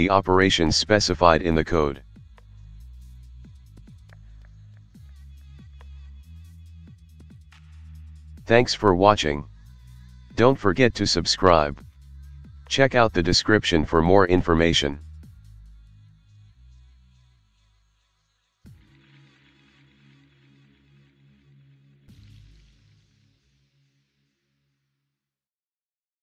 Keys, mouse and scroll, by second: 4.9 Escape.